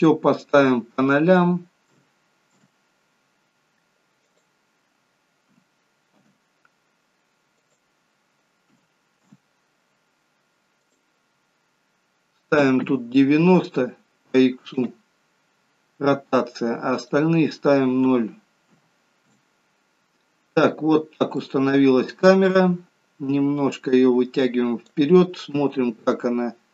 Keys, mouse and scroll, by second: 4.3 click, 7.6 click, 10.9 click, 17.0 click, 20.6-21.3 scroll up 5, 21.4 middle click, 23.4 click, 25.6 KP_0.